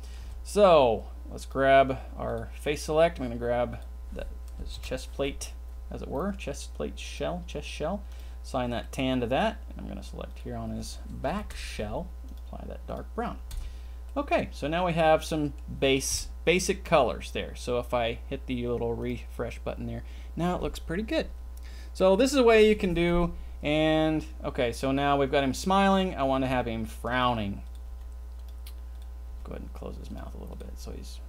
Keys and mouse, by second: 0.2 Tab, 3.7 click, 4.7 ctrl+l, 5.2 middle click, 6.0 middle click, 6.2 click, 7.0 click, 8.1 click, 8.8 middle click, 10.3 click, 11.5 ctrl+l, 12.2 click, 12.8 click, 13.6 Tab, 14.0 middle drag, 14.3 middle click, 14.5 middle drag, 14.6 click, 15.2 click, 15.2 middle click, 15.2 right click, 15.3 middle click, 15.4 click, 15.5 middle click, 16.1 KP_0, 16.9-17.3 middle drag, 19.0 click, 26.4 g, 28.0 g, 29.4 g, 30.5 click, 30.7 g.